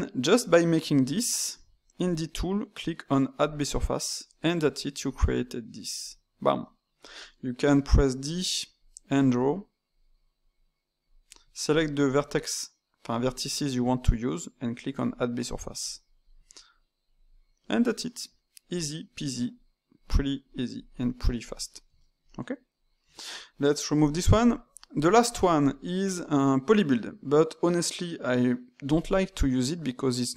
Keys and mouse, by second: 2.0 click, 3.3-4.3 drag, 4.3 middle click, 5.0 alt+click, 6.0 click, 6.6-7.6 middle drag, 7.6-9.9 typing, 8.2 click, 9.4 click, 10.5 click, 11.0 d, 11.6 alt+click, 14.9 click, 17.0 click, 17.6-18.7 middle drag, 18.7 click, 19.5 click, 20.4 click, 20.9 click, 21.6-23.0 middle drag, 23.0 Tab, 24.4 click, 24.7-25.5 middle drag, 25.5-28.6 drag.